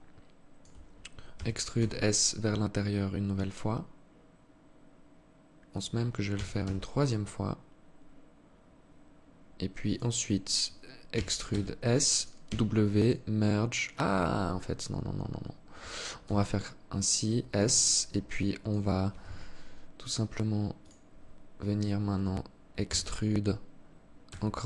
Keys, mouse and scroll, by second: 0.9 e, 5.9 e, 10.6 e, 11.9 w, 15.7 s, 17.3 alt+click, 20.3 click, 22.5 e.